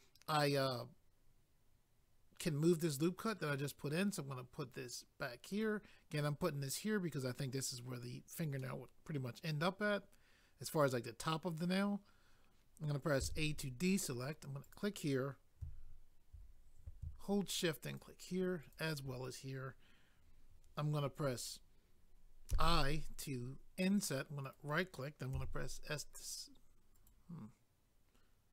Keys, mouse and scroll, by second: 5.5 click, 5.6 click, 8.6 middle click, 11.5 scroll up 1, 13.2 a, 14.6 click, 14.8 click, 17.9 shift+click, 18.6 shift+click, 24.4 right click, 25.3 s, 26.9 right click.